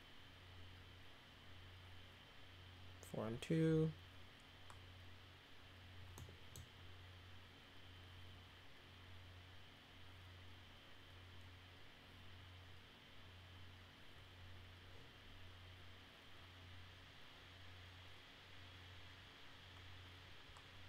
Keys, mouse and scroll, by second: 6.1-6.5 middle drag.